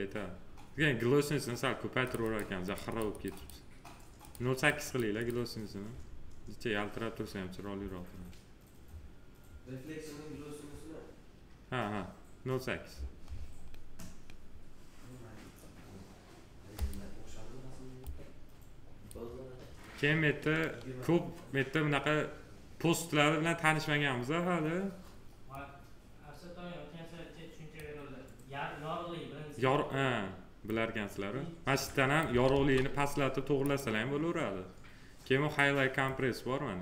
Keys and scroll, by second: 32.4 ctrl+z.